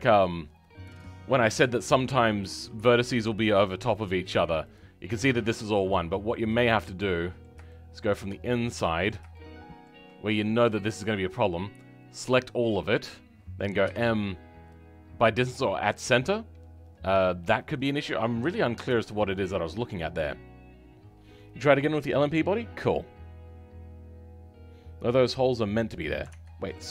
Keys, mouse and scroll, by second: 0.0-1.5 middle drag, 1.5 Tab, 1.8 scroll up 4, 4.0 click, 6.7-8.3 middle drag, 8.3 scroll up 1, 8.6-10.8 middle drag, 10.8-12.1 scroll up 2, 12.1 click, 12.6-17.3 middle drag, 17.3-17.6 scroll down 2, 17.6-26.9 middle drag.